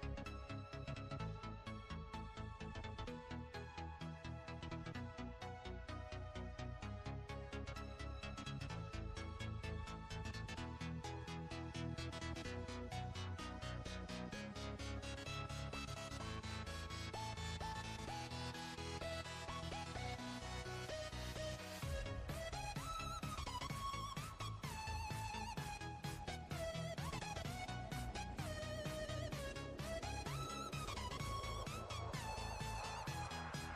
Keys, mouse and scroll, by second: 1.2 click, 3.9 alt+shift+click, 5.8 click, 7.2 click, 8.1 drag, 8.8-9.4 drag, 9.9-10.2 drag, 10.6-13.1 drag, 13.1 n, 22.2 click, 23.0 alt+click, 23.9 alt+shift+click, 24.7 alt+shift+click, 25.4 alt+shift+click, 26.5 alt+shift+click, 27.3 alt+shift+click, 28.6 ctrl+z, 29.2 alt+shift+click, 30.3 ctrl+z, 30.8 alt+shift+click, 31.9 ctrl+z, 32.6 alt+shift+click.